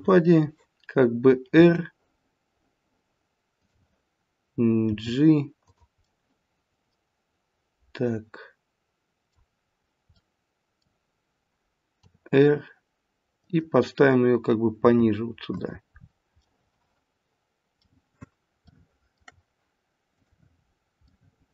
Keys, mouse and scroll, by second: 1.3 scroll down 2, 1.6 r, 4.9 g, 6.0 middle click, 9.6-10.2 scroll down 2, 10.2 middle click, 12.0 r, 14.8 g, 15.9-16.7 scroll up 5, 16.3 middle click, 20.1 click, 20.6-21.3 scroll up 2, 21.0 middle click.